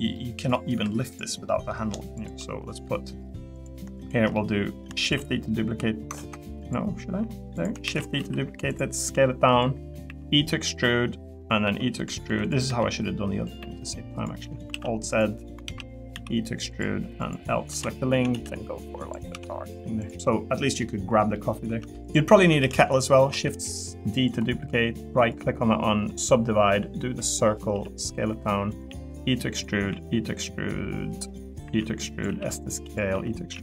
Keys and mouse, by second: 0.1 middle click, 0.3 click, 0.7 Tab, 1.1 click, 1.4 middle click, 2.2 shift+click, 3.9 shift+click, 4.3 middle click, 5.0 shift+d, 6.1 ctrl+z, 6.7 click, 7.8 shift+d, 8.1 s, 8.7 click, 9.1 click, 10.0 e, 10.7 click, 11.6 e, 12.2 3, 12.6 e, 13.6 e, 14.4 click, 14.7 alt+z, 15.4 click, 15.7 alt+z, 15.9 click, 16.1 e, 17.2 click, 17.7 l, 18.1 a, 18.3 g, 19.0 click, 19.3 Tab, 20.2 middle click, 20.8 middle click, 21.3 middle click, 22.0 click, 22.6 shift+d, 23.3 s, 24.1 click, 25.7 click, 27.7 s, 28.9 e, 29.5 click, 29.9 e, 32.3 s, 32.8 click, 33.1 e, 33.3 click, 33.5 s.